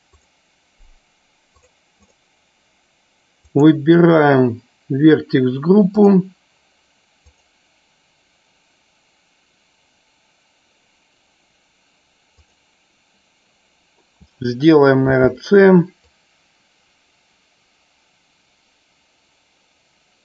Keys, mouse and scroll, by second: 0.2 click, 3.5 click, 7.3 click.